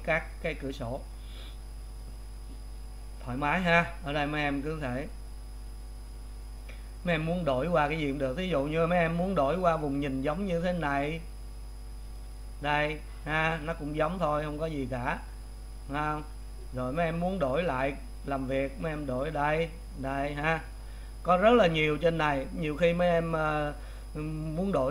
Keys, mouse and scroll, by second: 12.1-21.2 drag, 21.2-21.9 scroll down 1.